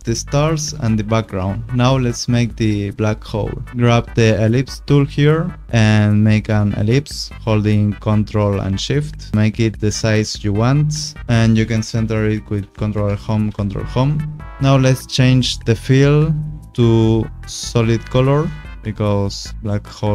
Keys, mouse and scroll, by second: 1.4 click, 3.7 click, 6.5 click, 8.6 ctrl+shift+click, 12.8 ctrl+alt+Home, 14.0 ctrl+Home, 14.7 click, 17.2 click, 18.6 click.